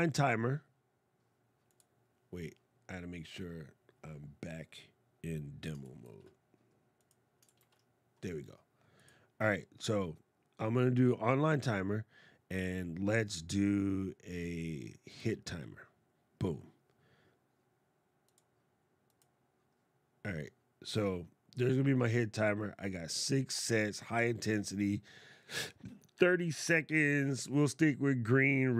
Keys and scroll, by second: 7.3 shift+super+d.